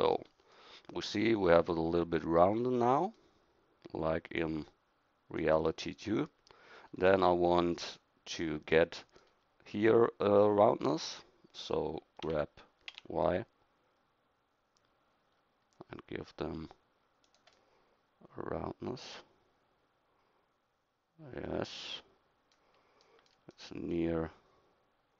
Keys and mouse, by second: 8.7 middle click, 12.3 g.